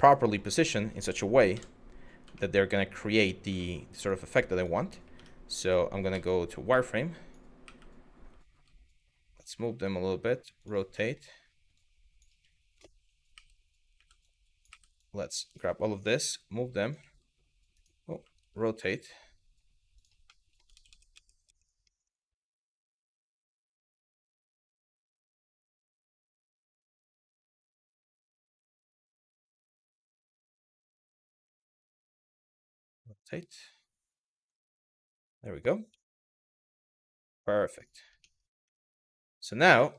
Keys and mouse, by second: 1.2 KP_3, 2.0 middle drag, 3.2 middle drag, 4.2 click, 4.8 Tab, 5.7 z, 6.7 click, 7.3 w, 8.2 g, 9.0 click, 9.3 r, 10.2 click, 10.7 shift+middle click, 11.4 click, 13.0 w, 13.6 w, 14.7 click, 15.8 g, 16.5 click, 16.6 e, 17.4-19.6 right drag, 19.6 click, 20.0 middle click, 20.4 ctrl+z, 20.5 ctrl+z, 21.5 middle click, 22.7 middle click, 23.3 KP_3, 24.2 click, 25.2 g, 26.3 click, 26.6 e, 28.0 ctrl+z, 31.7 r, 34.0 click, 34.4 middle click, 35.5 z, 36.3-37.3 middle drag, 38.3 Tab, 39.5 middle click, 39.9 click.